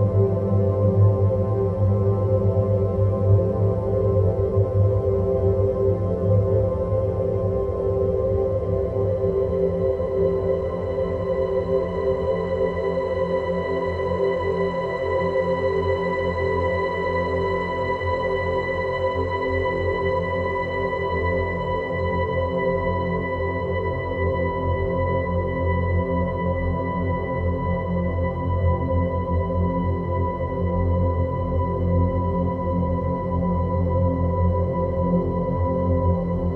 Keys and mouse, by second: 2.5 s, 10.6-12.0 drag, 13.3-14.2 drag, 18.1 click, 20.0 Tab, 22.7 click, 26.0-29.0 middle drag, 29.6 click, 31.1 click, 31.7 Tab, 32.4 click, 33.8 Tab, 34.9 click, 35.9 click.